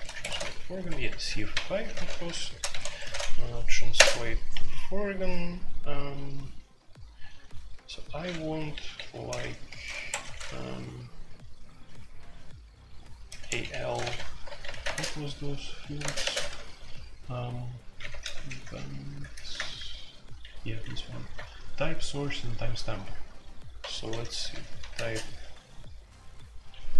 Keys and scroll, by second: 0.0-4.4 typing, 0.1 Escape, 0.8 Escape, 9.5-10.0 typing, 9.9 Escape, 13.2-13.7 typing, 14.0 Escape, 14.7 alt+1, 14.8 space, 14.9 Tab, 16.0-16.9 typing, 16.0 Tab, 18.1-21.6 typing, 23.8-24.9 typing, 26.8-26.9 typing.